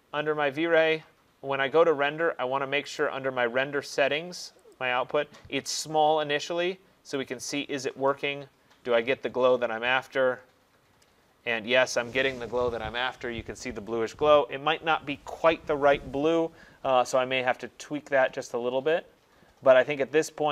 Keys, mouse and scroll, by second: 0.0 click, 3.1 click, 4.8 click, 7.4 click.